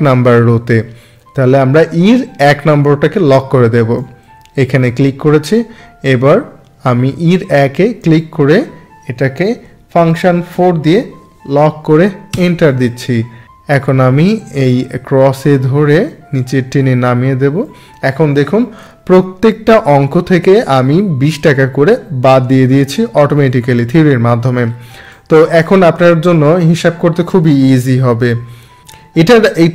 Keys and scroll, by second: 10.5 F4, 12.3 Return.